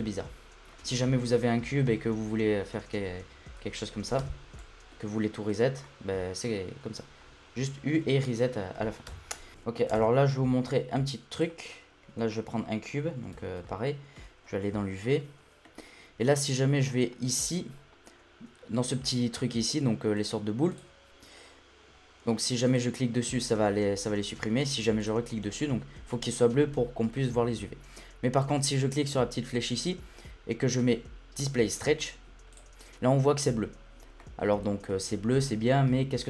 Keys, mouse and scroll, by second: 0.5 scroll down 1, 0.7 middle click, 0.9 Tab, 4.2 Tab, 4.5-5.5 middle drag, 5.5 click, 5.8-7.5 middle drag, 7.5 u, 9.1 Tab, 9.5 click, 9.9 shift+a, 12.0 scroll down 1, 12.3 shift+middle drag, 12.6-13.1 scroll up 2, 13.1 scroll up 1, 13.3 Tab, 13.7-14.4 shift+middle drag, 14.4-15.1 scroll up 9, 15.1-17.2 middle drag, 17.2-17.9 scroll down 9, 20.1 click, 20.7 click, 22.7 click, 25.0 click, 29.0-32.2 drag, 32.5 click, 32.8-33.7 scroll up 3, 33.7 scroll down 2, 33.9-34.2 scroll up 1, 34.2-34.9 middle drag, 34.9 l, 35.5-36.2 shift+middle drag.